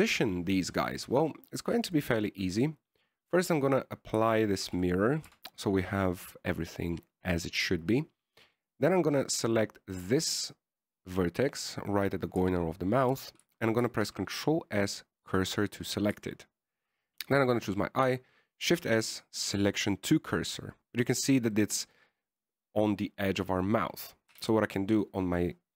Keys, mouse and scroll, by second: 3.2 click, 6.0 ctrl+a, 6.6 Tab, 9.9 right click, 13.7 Tab, 14.4 Tab, 15.1 shift+s, 17.1 right click, 17.1 shift+s, 20.0 shift+s, 22.9 middle click, 25.6 KP_1.